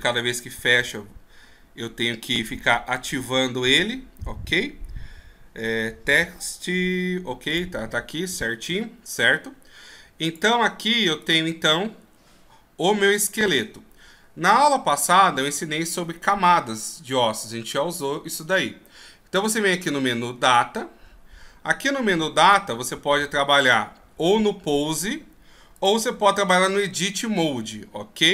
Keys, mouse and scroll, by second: 6.2 click, 8.8 n, 10.4 click, 20.6 click, 22.5 click, 25.9 click.